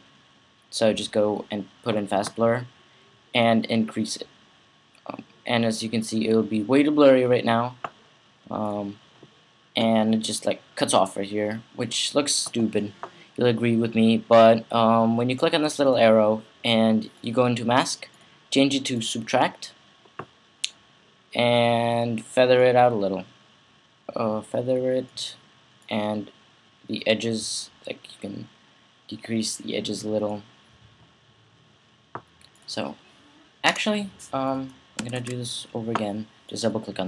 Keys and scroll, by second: 33.5 BackSpace, 34.5 super+BackSpace, 34.8 c, 34.9 super+v.